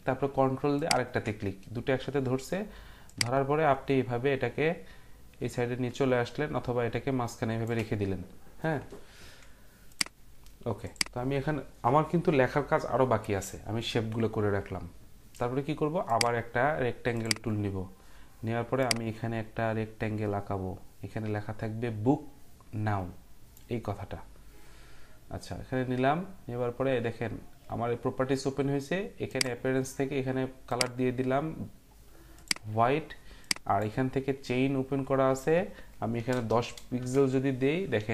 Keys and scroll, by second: 35.9-36.8 typing, 37.0 Return.